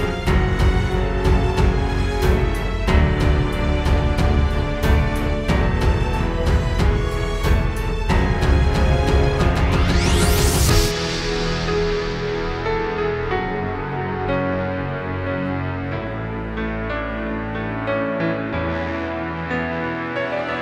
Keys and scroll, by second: 1.7 super+[, 3.4 space, 4.7 space, 5.5 space, 6.7 space, 11.6 space, 11.9 space, 15.5 super+Tab.